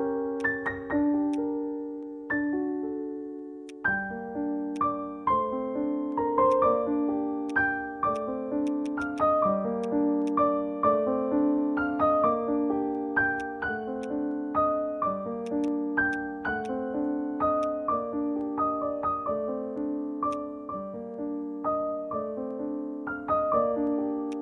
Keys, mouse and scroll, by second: 0.4 alt+click, 3.7 alt+click, 4.4 alt+middle click, 4.8 alt+click, 5.9 scroll down 1, 6.1 scroll up 1, 6.5 alt+click, 8.8 double click, 13.4 right click, 14.8 scroll up 1, 14.8 scroll down 1, 15.6 right click, 19.2 scroll up 1, 24.3 alt+click.